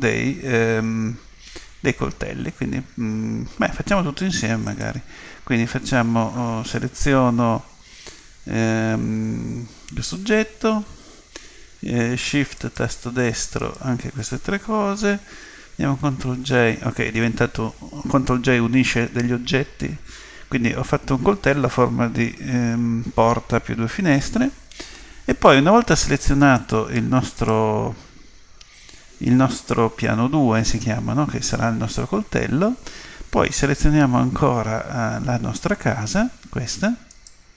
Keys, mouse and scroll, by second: 4.7 click, 12.6 right click, 16.0 ctrl+j, 26.6 right click, 37.1 right click.